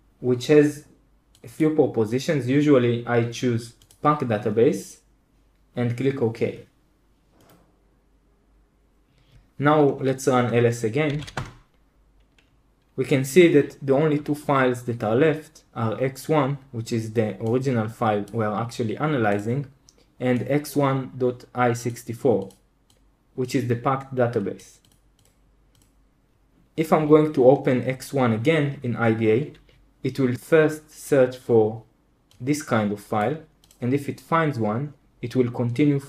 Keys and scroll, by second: 10.8-11.6 typing.